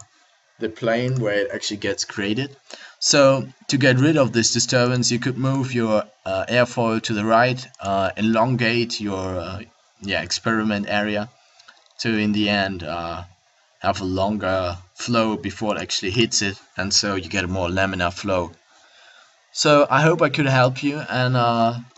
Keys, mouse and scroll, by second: 1.9 h.